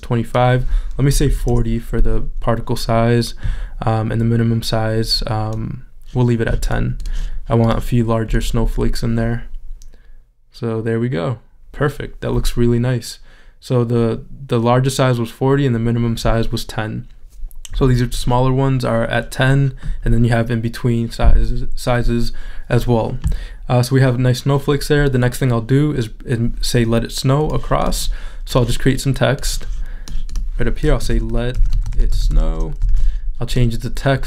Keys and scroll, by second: 1.1 4, 2.5 Return, 33.9 super+a.